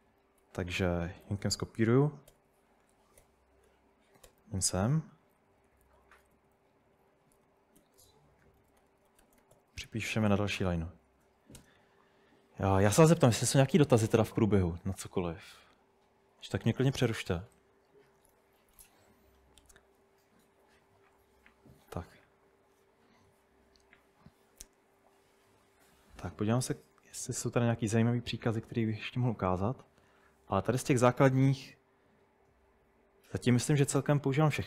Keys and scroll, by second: 0.4-11.6 typing.